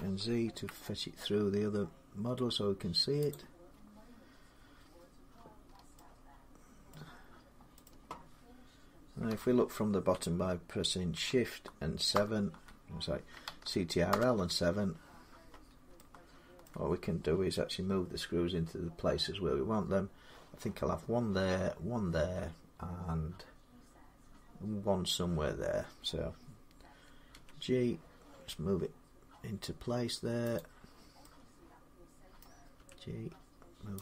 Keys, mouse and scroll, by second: 0.0-0.6 typing, 3.1 click, 5.4 scroll down 1, 5.5 scroll up 3, 6.7 middle click, 6.7 scroll up 1, 7.7 middle click, 9.1 7, 11.9 Home, 12.7 shift+middle click, 13.9 ctrl+7, 16.5 shift+middle click, 27.1 g, 30.4-31.7 drag, 32.2 middle click, 32.6 g, 33.9 click.